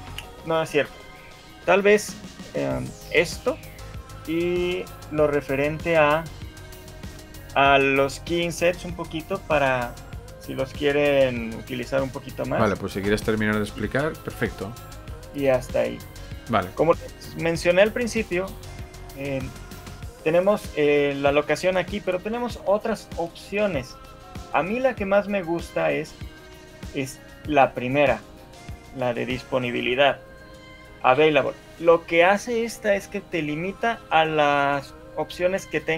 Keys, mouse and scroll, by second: 3.2 click, 6.6 shift+middle click, 22.6 click, 31.2 Escape, 34.4 click, 34.8 click, 35.8 click.